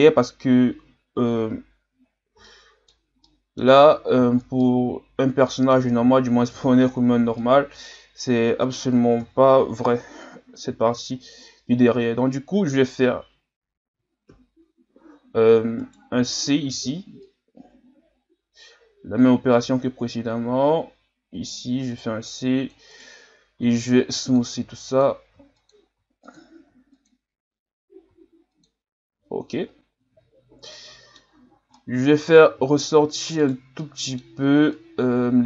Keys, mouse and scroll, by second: 2.0-2.4 scroll up 3, 2.4-4.2 middle drag, 4.2-4.6 scroll up 4, 4.6-6.2 middle drag, 6.2 scroll down 4, 6.5 Tab, 7.4-9.2 middle drag, 9.2 KP_3, 10.6 z, 14.3 KP_3, 15.8 right click, 16.7 c, 23.6 w, 24.7 w, 25.3 w, 26.0 w, 26.7 w, 28.1 w, 29.1 a, 29.4-30.2 scroll down 5, 30.2 z, 30.7 middle click, 31.3-31.7 scroll up 1, 31.7 middle click, 32.7-33.4 scroll up 1, 33.4 right click, 33.8 middle click, 34.7-35.4 drag.